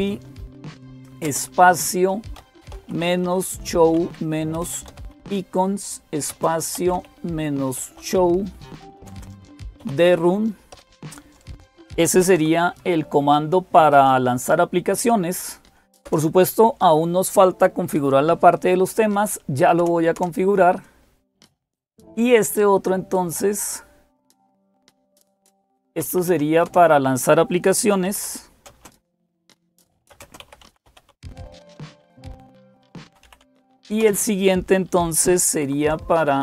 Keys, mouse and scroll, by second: 0.0-36.4 typing, 1.1 Right, 2.2 Right, 2.6 Right, 3.1 Right, 15.9 Return, 19.6 Return, 20.0 Return, 25.4 Up, 25.6 Up, 25.8 Up, 26.0 Up, 26.1 Up, 26.5 Return, 35.5 Down, 36.2 Down.